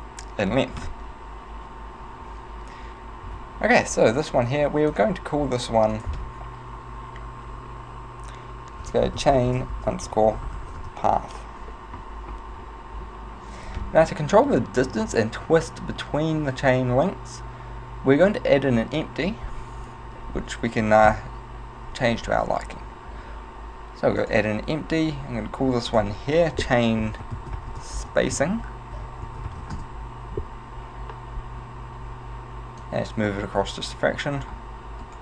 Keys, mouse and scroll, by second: 3.3 Tab, 5.0 click, 6.0 click, 22.3 shift+a, 26.0 click, 31.5-32.9 scroll up 1, 32.9 click, 35.1 right click.